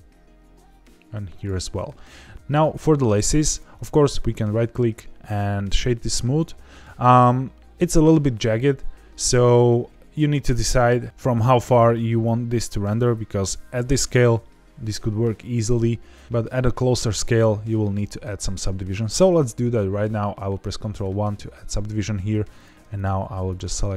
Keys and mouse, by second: 1.3 ctrl+click, 1.7 middle click, 3.7-5.8 right drag, 21.0 ctrl+1, 22.9 shift+click.